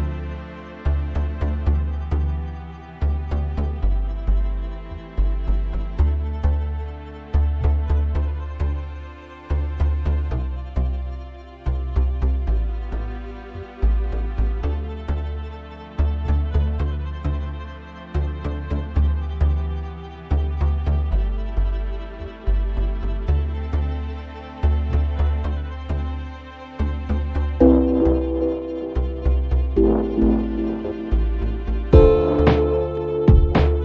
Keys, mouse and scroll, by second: 1.9 click, 3.4 click, 4.6 click, 8.8 click, 10.1 click, 12.0 5, 13.0 click, 13.5 click, 14.8 2, 15.5 0, 16.4 click, 17.1 click, 18.5 1, 19.2 0, 20.5 click, 21.8 click, 22.4 0, 23.8 scroll up 2, 24.8 click, 25.9 click, 29.0 click, 30.0-30.3 scroll down 1, 30.8 scroll up 1, 32.6 click, 33.7 click.